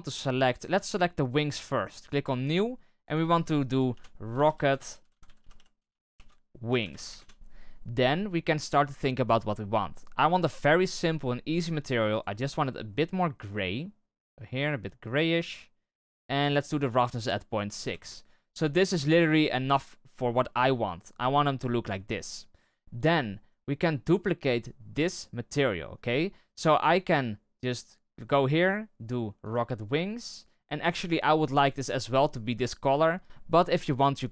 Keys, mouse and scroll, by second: 2.5-7.1 drag, 7.1 BackSpace, 17.9 click, 18.7-19.1 scroll up 1, 19.1-20.6 shift+middle drag, 20.6-20.9 scroll up 1, 20.9-21.9 middle drag, 21.9-22.8 scroll down 1, 22.8-23.1 scroll down 1, 23.1-26.9 shift+middle drag, 26.9-28.0 right drag, 28.0-34.3 drag.